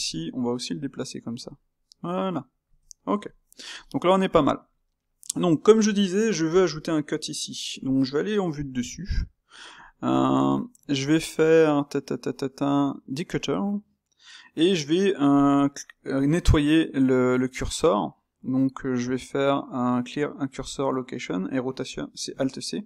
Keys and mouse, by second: 0.0 middle click, 0.6 g, 1.6-2.7 middle drag, 2.7 Tab, 2.9-8.6 middle drag, 8.6 KP_7, 9.5-13.3 ctrl+shift+middle drag, 13.3 space.